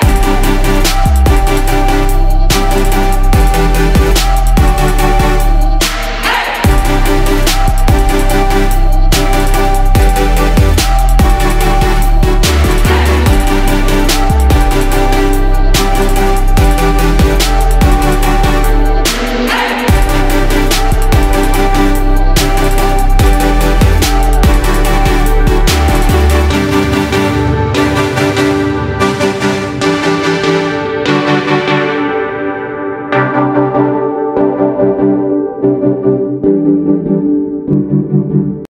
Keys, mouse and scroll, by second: 1.6 Down, 1.8 Down, 2.0 Down, 5.9-10.2 drag, 10.8 ctrl+g, 12.1 click, 14.6 Down, 14.9 Down, 15.4 Down, 18.9 click.